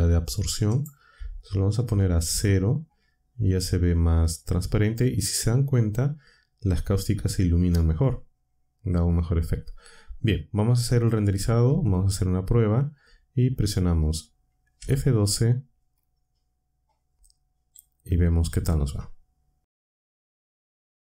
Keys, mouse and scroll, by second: 0.7 click, 1.6-2.3 typing, 11.6 z, 14.7 F12, 18.5 ctrl+Up.